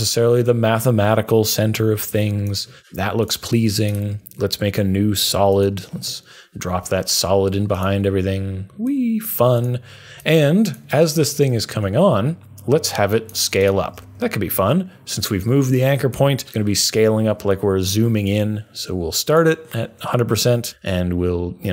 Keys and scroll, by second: 14.0 s.